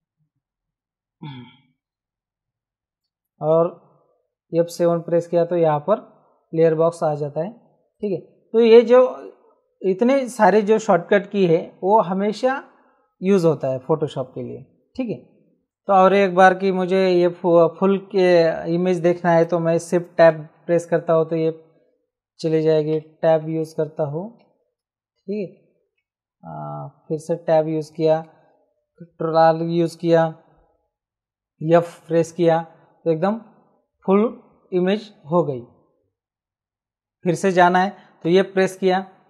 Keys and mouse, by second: 2.6 F7, 7.9 click, 20.2 shift+Tab, 22.9 Tab, 23.6 shift+Tab, 25.5 Tab, 28.6 ctrl+r, 30.7 f, 31.8 f, 38.2 f.